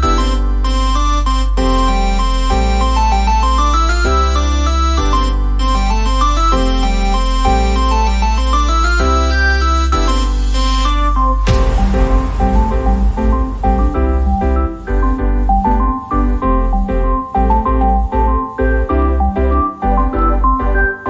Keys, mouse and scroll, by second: 3.9 f, 8.7 f, 8.9 ctrl+s, 9.6 f.